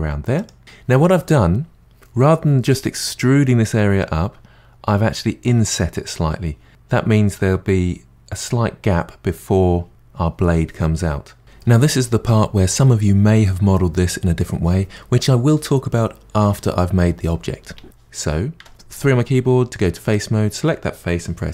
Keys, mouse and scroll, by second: 18.6 3, 20.1 click.